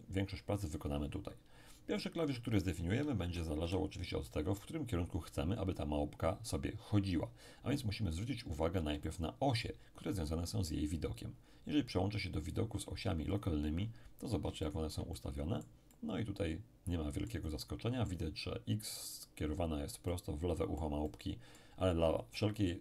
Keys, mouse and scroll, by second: 2.2-3.1 scroll up 1, 3.1 scroll up 1, 3.1 KP_1, 3.6 KP_7, 8.2-8.9 scroll up 2, 8.9 shift+scroll up 1, 9.0-10.6 shift+middle drag, 12.5 click, 14.6-19.1 shift+middle drag, 20.1-22.5 middle drag.